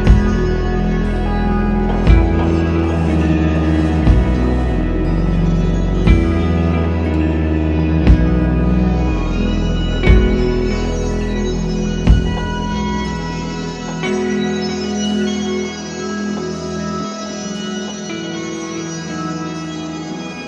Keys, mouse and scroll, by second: 0.4-3.3 drag, 5.9-7.5 drag, 12.2 g.